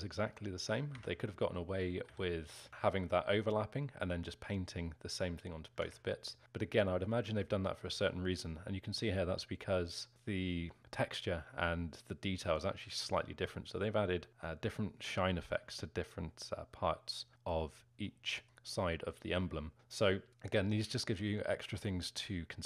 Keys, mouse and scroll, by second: 1.5 alt+middle click, 2.1 z, 2.7 z, 5.9 Tab, 6.3-7.0 scroll up 2, 7.0-7.5 scroll down 1, 7.5-16.8 alt+middle drag, 16.8-17.3 scroll down 1, 17.3-19.0 alt+middle drag, 19.0-19.7 scroll down 4, 19.7 scroll down 1, 19.7-22.6 scroll up 4.